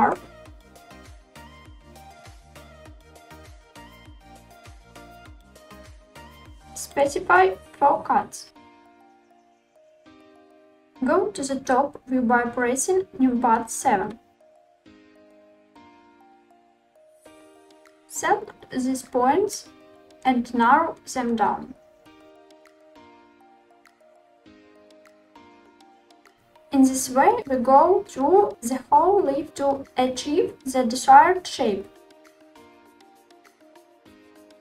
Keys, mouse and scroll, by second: 1.6 click, 3.3 ctrl+r, 4.2 click, 6.5 click, 7.7-9.7 drag, 10.1 click, 12.6 KP_7, 13.1-14.7 middle drag, 14.8 scroll up 1, 15.0 shift+middle click, 15.4 scroll down 1, 15.5-16.0 scroll up 2, 17.2-19.2 drag, 21.5 s, 24.3 click, 25.5 click, 27.2 s, 28.3 click, 28.8 click, 30.1 s, 32.1 click, 32.7-33.7 drag, 34.0 s.